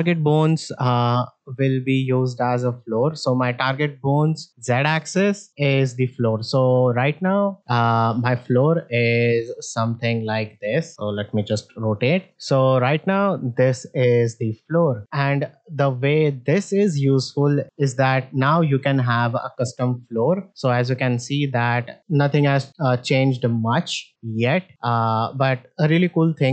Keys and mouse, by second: 1.0-2.1 drag, 2.7 middle drag, 9.3 ctrl+Tab, 9.9-10.2 middle drag, 11.1 r, 12.3 alt+z, 12.3 alt+s, 12.9-13.4 middle drag, 14.7 alt+s, 14.7 alt+x, 15.0 alt+z, 15.5 middle drag, 16.4 click, 17.2 ctrl+Tab, 17.7-18.2 drag, 19.1-20.5 drag, 21.0-22.4 drag, 23.2 middle drag, 24.5-25.2 drag, 25.7 middle drag.